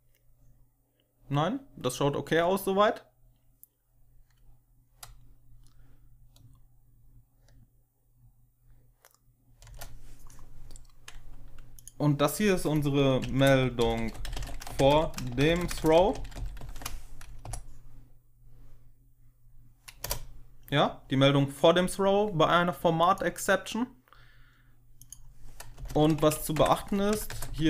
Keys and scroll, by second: 9.5 Return, 12.9-17.0 typing, 17.3 F5, 19.9 Return, 25.7 Return, 25.8-27.6 typing, 26.1 Tab, 26.4 Tab.